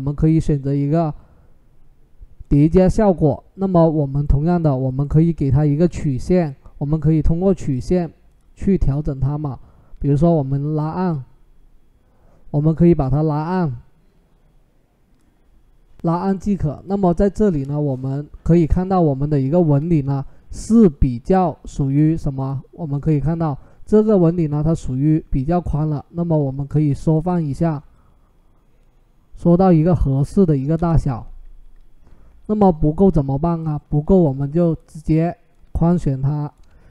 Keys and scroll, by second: 18.2 Delete, 19.4 ctrl+t, 24.4 ctrl+t, 30.5 Return.